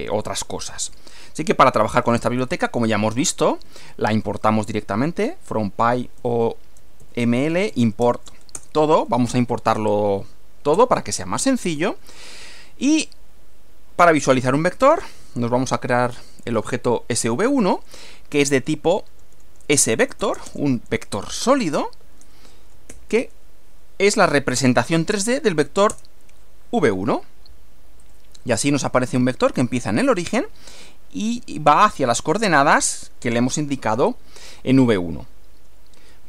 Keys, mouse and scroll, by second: 1.7-4.3 typing, 6.2-8.2 typing, 8.5 Return, 10.7 Return, 14.5-15.7 typing, 17.2-22.9 typing, 25.9 Return, 28.1 click, 32.9 click.